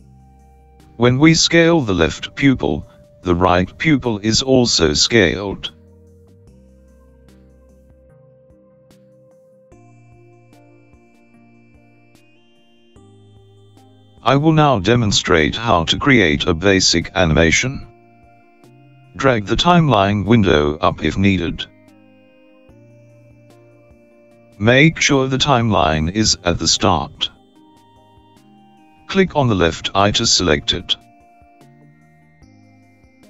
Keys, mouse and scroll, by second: 4.3 click, 8.4 s, 22.6 click, 29.1 click.